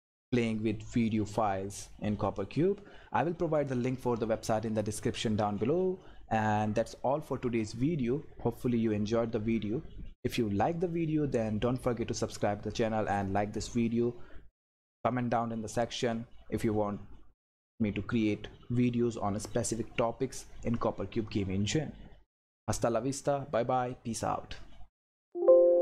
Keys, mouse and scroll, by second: 7.1 click, 25.1 click.